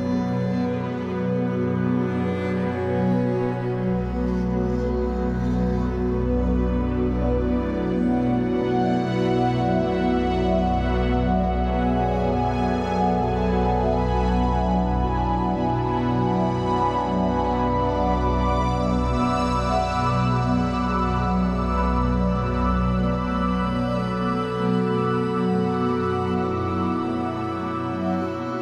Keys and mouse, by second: 2.1 ctrl+alt+click, 2.9 alt+shift+click, 3.3 ctrl+alt+middle click, 3.4 ctrl+alt+click, 3.9 alt+shift+click, 5.3 click, 9.7 ctrl+s, 10.4 alt+shift+click, 11.9-13.0 ctrl+alt+drag, 14.1-17.2 drag, 20.4 click, 21.5 click, 22.1 click, 23.8 click, 24.8 alt+click, 26.2 click.